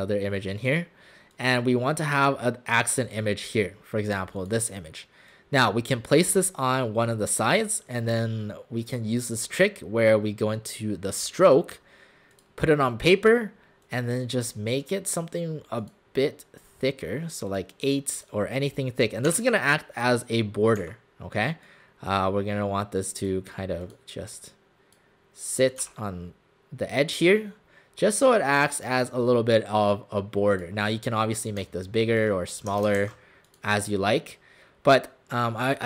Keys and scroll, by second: 19.3 w, 20.8 w, 25.9 w, 33.0 ctrl+alt+shift+c.